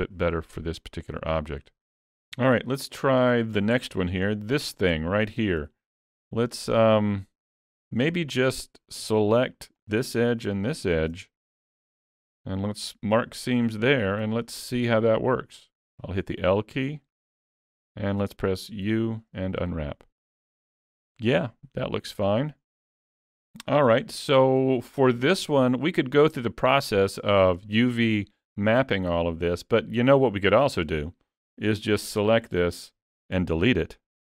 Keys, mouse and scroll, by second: 2.7 shift+middle click, 3.5-3.9 scroll up 3, 3.9 shift+middle click, 4.3 middle click, 5.6 alt+a, 6.3 scroll up 1, 6.4 shift+middle click, 6.8 middle click, 9.0 2, 9.8 alt+click, 10.6 alt+shift+click, 11.8 ctrl+e, 13.2 middle click, 14.2 alt+a, 14.6-16.3 scroll down 3, 14.9 middle click, 16.9 l, 21.5 middle click, 23.6-24.0 scroll down 3, 24.0 shift+middle click, 32.5 l.